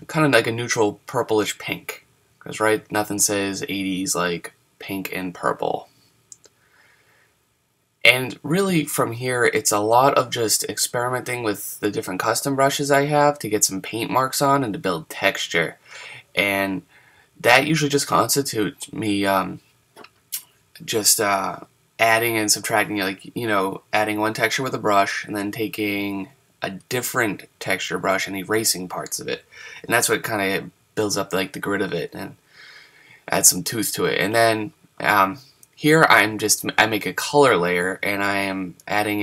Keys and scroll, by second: 6.8 super+z, 36.9 super+z, 37.5 super+z.